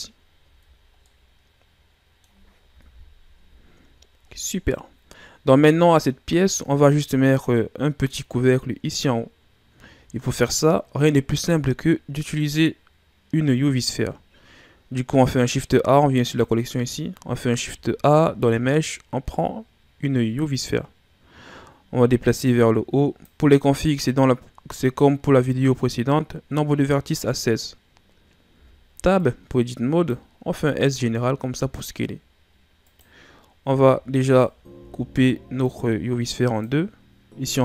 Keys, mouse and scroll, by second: 0.4 Tab, 1.0-2.8 middle drag, 2.8 KP_1, 3.4 a, 4.0-5.1 scroll down 1, 13.4 shift+a, 16.2 click, 17.4 shift+a, 22.0-25.0 drag, 28.5 Tab, 29.1-30.4 drag, 30.4 s, 33.6 z, 34.2 right click, 34.7 b.